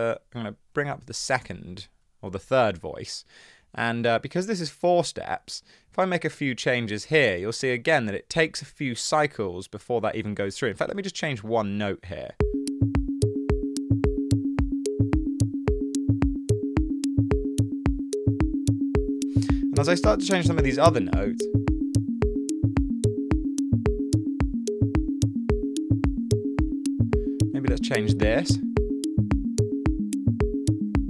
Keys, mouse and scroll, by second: 0.2 click, 0.9-1.8 typing, 10.3 super+z, 10.5 super+z, 11.6 super+z, 12.5 space.